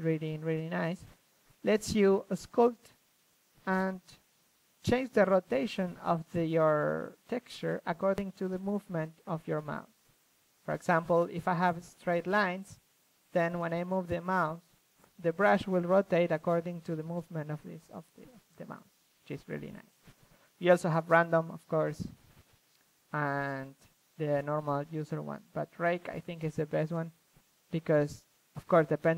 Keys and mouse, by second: 0.0 f, 0.3-1.5 drag, 0.9 f, 1.9 ctrl+f, 2.4-3.9 drag, 4.2 ctrl+z, 4.4-5.3 drag, 5.3 middle click, 5.4-7.0 drag, 7.0 ctrl+z, 7.0-7.3 middle drag, 7.0 f, 7.3-9.7 drag, 10.0-12.3 middle drag, 12.3-13.1 drag, 13.1 shift+b, 14.4 ctrl+z, 14.6 f, 15.1 shift+f, 18.6 ctrl+z, 18.9-19.7 drag, 21.4-23.1 drag, 23.4 ctrl+z, 23.5 f, 23.8-24.5 drag, 24.5 shift+f, 24.6 drag, 25.2 click, 25.5-27.3 drag, 27.4-28.6 drag, 27.7 ctrl+z, 28.6 ctrl+f.